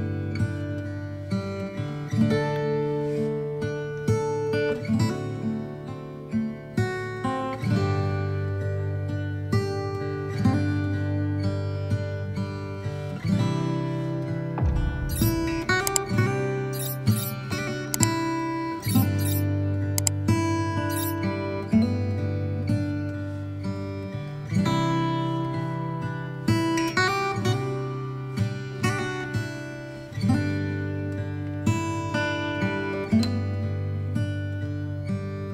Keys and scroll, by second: 8.4 v, 14.1 space, 14.9 space, 18.4 space, 20.7 space.